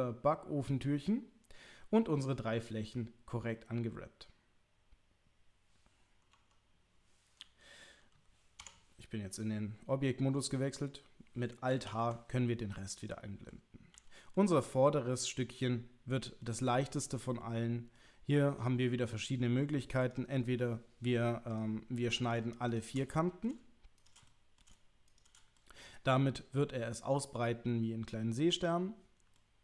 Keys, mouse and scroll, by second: 6.3 Tab, 7.4-7.8 middle drag, 8.6 Tab, 11.9 alt+h, 13.9 l, 14.3-15.6 middle drag, 16.4 middle click, 17.9 middle click, 22.2 click, 22.7 shift+click, 23.1 middle click, 24.2 middle click, 25.1 shift+click, 25.5-27.4 middle drag, 29.3-29.6 middle drag.